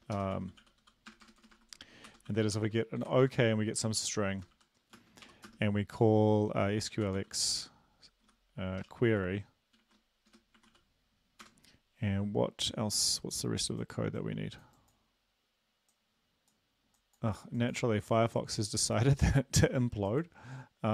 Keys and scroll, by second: 0.0-2.5 typing, 3.1 End, 3.2 Right, 4.0 Left, 4.5-5.5 typing, 7.0-10.7 typing, 11.4 Return.